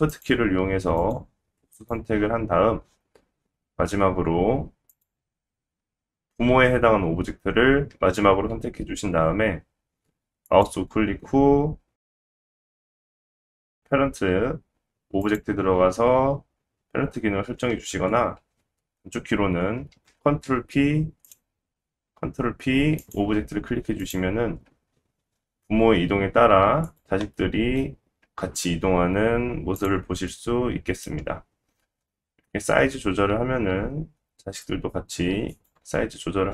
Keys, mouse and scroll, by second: 0.1 shift+click, 1.0 shift+click, 1.7 shift+click, 4.7-18.8 shift+drag, 10.4 right click, 17.7 ctrl+z, 20.0 ctrl+p, 24.0 click, 24.7 g, 27.0-36.5 middle drag, 28.2 g, 31.8 s.